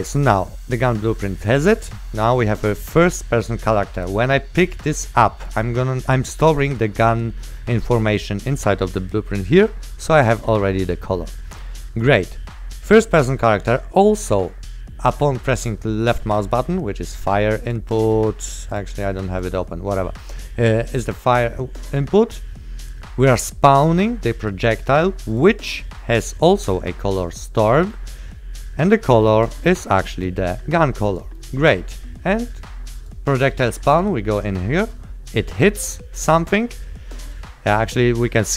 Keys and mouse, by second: 0.2 click, 4.1 click, 10.3 click, 16.3 click, 25.4 click, 29.3 click, 29.9 click, 31.5 right click, 33.1 click, 34.7 right click, 36.0 click, 36.3 right click, 38.0 click.